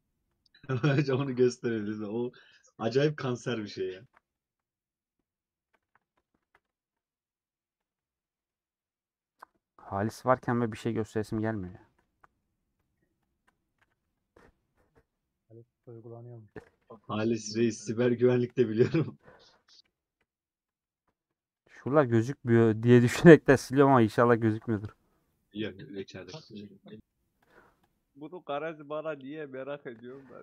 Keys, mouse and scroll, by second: 0.4 click, 1.1 /, 1.4 middle click, 1.9 3, 3.5 middle click, 4.1 2, 4.3 alt+click, 4.7 middle click, 6.1 alt+click, 6.5 ctrl+x, 6.7-7.9 shift+middle drag, 7.9 alt+click, 8.1 middle click, 9.8 alt+click, 10.5 middle click, 11.4 click, 11.7-13.4 shift+middle drag, 13.4 shift+click, 13.9 a, 14.7-15.2 scroll down 2, 15.2 middle click, 16.0 Tab, 16.1-17.3 middle drag, 17.3 /, 18.0 Tab, 18.2 Tab, 19.4 click, 20.2 /, 20.5 middle click, 20.9 Tab, 22.8-24.1 middle drag, 24.1 3, 25.5 alt+click, 26.5-27.6 middle drag, 27.7-29.2 alt+drag, 29.2 ;, 29.5 scroll down 2, 29.6 middle click.